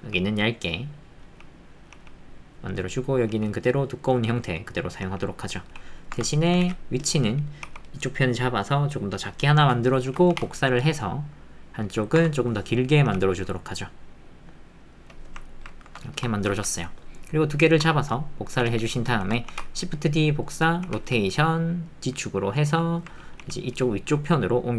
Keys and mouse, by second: 0.0-6.5 g, 6.6 alt+z, 7.6 g, 9.6 Tab, 10.3 shift+d, 12.2 Tab, 13.0 g, 18.6 alt+z, 19.5 shift+d, 20.8 r, 23.4 g.